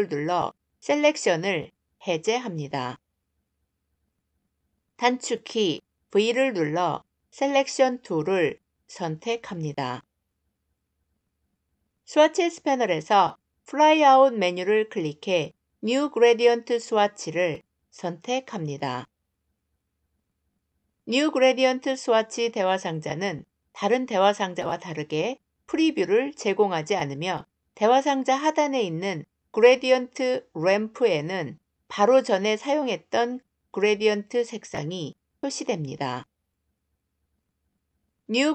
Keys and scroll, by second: 5.2 v.